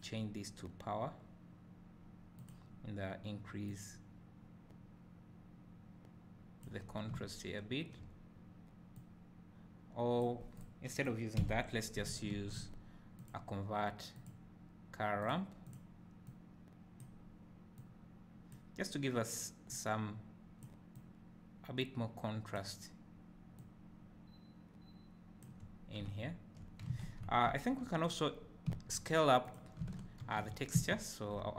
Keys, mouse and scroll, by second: 0.0-2.0 drag, 4.3-11.6 drag, 7.0 scroll down 2, 7.2 `, 11.6 Delete, 17.0-29.5 drag, 25.8 scroll down 1, 26.2 `, 28.2-28.7 scroll up 2, 28.7 `, 30.4 ctrl+t, 31.0 `.